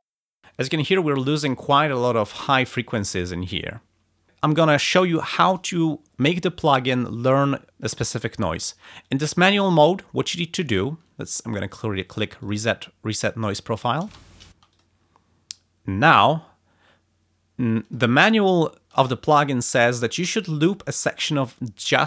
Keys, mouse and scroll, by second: 0.1 space, 9.0 click, 12.4 click, 14.0 space, 14.7 click, 17.7 click, 18.3 ctrl+scroll up 2, 20.2 r, 20.6-21.6 drag.